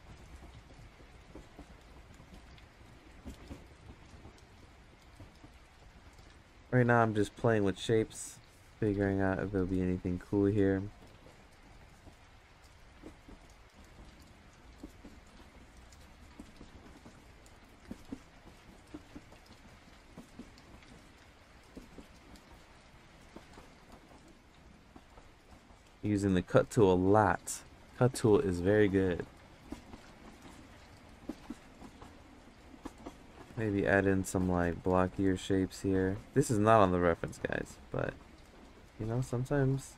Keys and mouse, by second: 1.6 click, 2.3 ctrl+z, 2.7-4.2 drag, 5.1 click, 9.3 click, 13.0 click, 13.9 ctrl+z, 14.3-15.8 drag, 16.0 ctrl+z, 16.6-18.6 drag, 19.5 ctrl+z, 20.4 click, 21.4 ctrl+z, 22.5-24.2 drag, 26.7 click, 32.8 click, 33.5 ctrl+z, 33.7 click, 34.7 ctrl+z, 35.1 click, 36.1 ctrl+z, 36.4-38.5 drag, 39.3 ctrl+z.